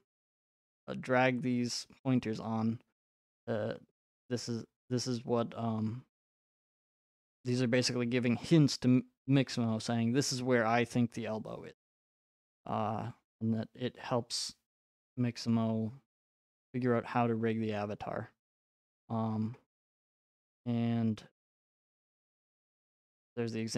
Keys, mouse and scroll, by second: 2.0 click, 8.7-10.6 drag, 12.1-14.1 drag, 15.5-20.7 drag.